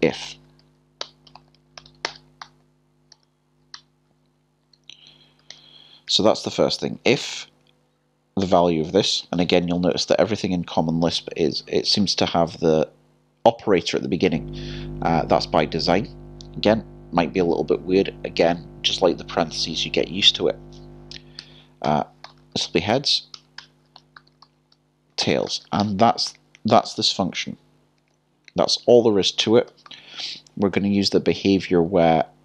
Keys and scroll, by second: 3.1-4.6 typing, 8.4-9.6 typing, 12.0 typing, 26.6 typing, 28.1 k, 30.5 typing, 31.5-32.3 typing.